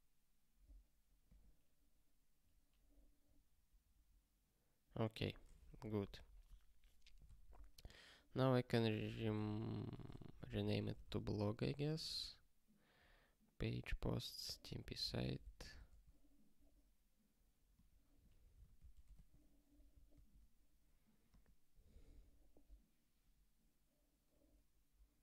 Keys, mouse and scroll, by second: 7.2 ctrl+k, 8.6 click, 9.1 ctrl+b, 9.3 alt+d, 9.9-11.2 typing, 14.8 ctrl+s, 15.1 ctrl+k.